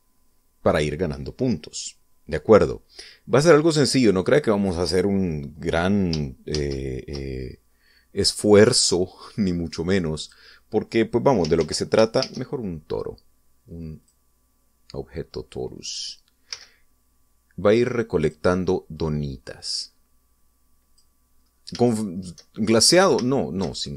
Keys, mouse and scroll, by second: 5.0 click, 7.3 shift+a, 10.2 click, 11.0 click, 12.4 ctrl+z, 14.8 click, 17.3 s, 19.0 click, 19.8-22.0 drag, 22.1-22.6 scroll up 3, 22.7 shift+middle click, 23.4 shift+middle click.